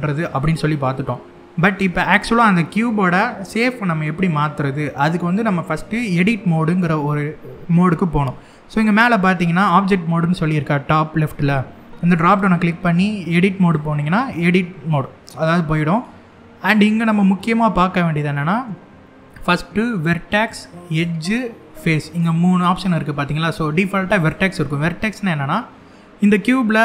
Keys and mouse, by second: 12.0-13.4 drag, 14.7 middle click, 19.9 click, 20.6 click, 21.5 click, 23.8 click, 25.2 middle click, 26.7 click.